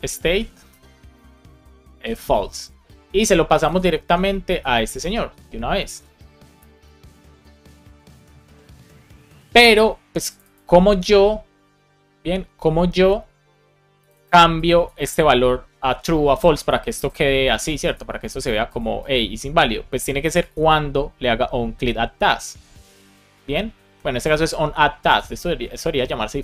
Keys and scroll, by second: 0.6 Return, 1.2 shift+9, 3.9 super+c, 5.2 super+v, 5.7 super+z, 6.5 Return, 6.7 super+v, 8.0 shift+[, 8.2 super+v, 8.5 super+s.